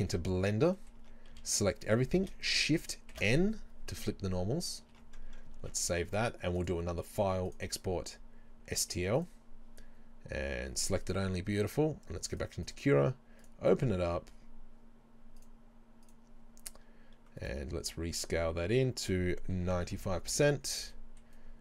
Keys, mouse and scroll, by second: 1.0 middle click, 1.1 Tab, 1.4 a, 3.2 shift+n, 5.0 Tab, 11.2 click, 12.7-21.6 drag.